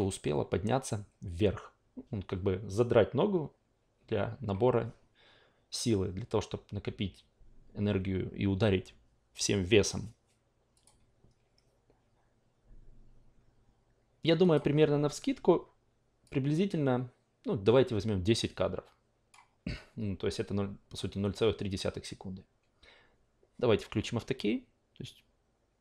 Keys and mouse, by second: 10.7 click, 14.4 click, 16.2-19.3 drag.